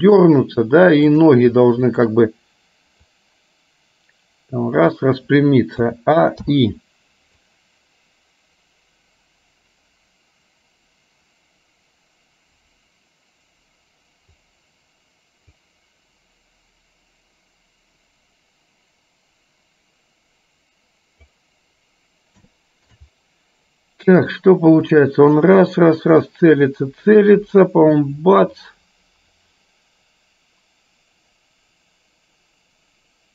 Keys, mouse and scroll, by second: 1.2 click, 2.1 shift+click, 3.2-5.1 drag, 5.9 a, 6.6 i, 7.6-14.6 drag, 15.7-21.4 drag, 22.6 shift+middle click, 24.4 click, 25.1-33.3 drag.